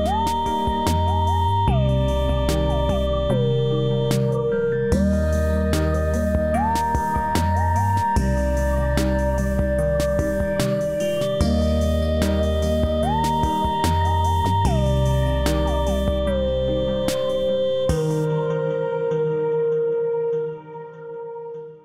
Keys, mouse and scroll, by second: 0.2 click, 1.2 w, 1.9-4.1 drag, 4.3-6.1 alt+middle drag, 6.6 space, 6.7 click, 10.9 space, 11.8 click, 14.9-16.2 scroll down 1, 18.0 scroll up 1.